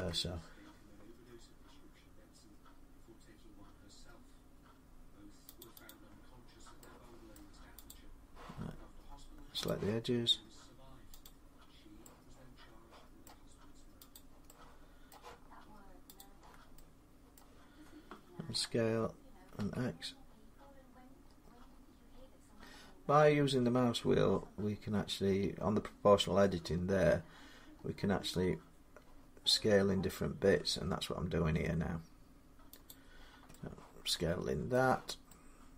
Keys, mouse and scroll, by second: 1.1 scroll up 2, 3.6 scroll up 1, 4.6 scroll down 1, 5.4 click, 5.6 click, 7.1-7.7 scroll, 7.7 click, 8.5 middle click, 9.5 click, 11.1 middle click, 13.0 middle click, 14.0 click, 14.9 middle click, 16.0 shift+click, 17.2 middle click, 18.3 s, 19.4 x, 21.1-22.1 scroll, 22.1-22.7 scroll up 14, 22.7 scroll down 5, 23.0 scroll up 1, 23.1 scroll down 1, 23.3 scroll up 2, 23.5 scroll down 2, 23.7-25.4 scroll, 25.6-27.5 scroll, 27.5 scroll, 32.7 click, 33.0 scroll down 4, 34.5 middle click, 35.3 scroll, 35.6 middle click.